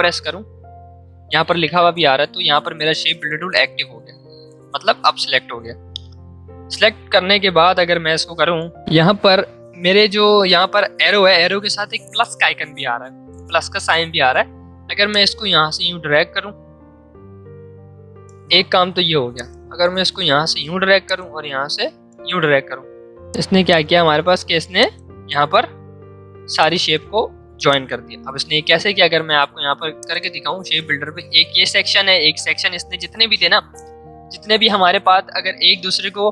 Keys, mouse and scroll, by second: 15.0 shift+m, 15.1-22.8 drag, 22.8 v, 23.3 click, 23.6 space, 23.7 click, 24.1 space, 24.8-29.9 drag.